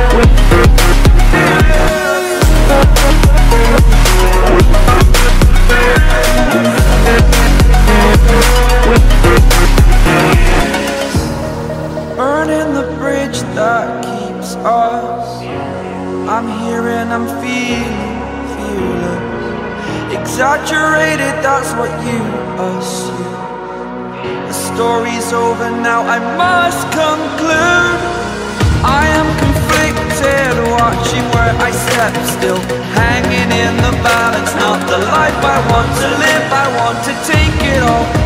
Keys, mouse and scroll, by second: 0.0 ctrl+z, 0.5-3.2 drag, 3.2 scroll down 1, 4.1 scroll up 1, 5.5 click, 6.3 ctrl+z, 6.8-9.8 drag, 9.8 scroll down 1, 10.2 scroll up 1, 11.0 click, 11.2 scroll up 1, 11.7 click, 12.5 scroll down 1, 12.8 scroll up 1, 13.8 click, 14.4 scroll down 1, 15.1 scroll up 1, 15.7 click, 17.3 scroll down 1, 17.5-17.9 scroll up 1, 18.2 click, 20.0-20.4 scroll down 1, 20.5 scroll up 1, 21.4-23.9 drag, 24.2 scroll down 1, 24.6 scroll up 1, 25.4 click, 25.9 scroll down 1, 26.2 scroll up 1, 26.7 click, 27.5-27.8 scroll down 1, 27.8 scroll up 1, 28.8 click, 29.7 scroll down 1, 30.4-30.8 scroll up 1, 31.4 click, 34.6 scroll down 1, 34.9-35.7 scroll up 1, 36.1 click, 37.7 scroll down 1, 38.0-38.2 scroll up 1.